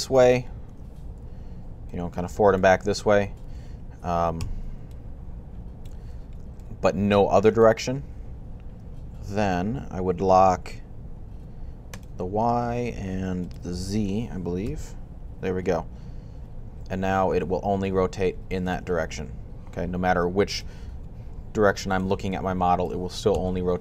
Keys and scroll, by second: 1.1-4.7 typing, 7.5 typing, 10.4 typing, 14.5 r, 20.7 r.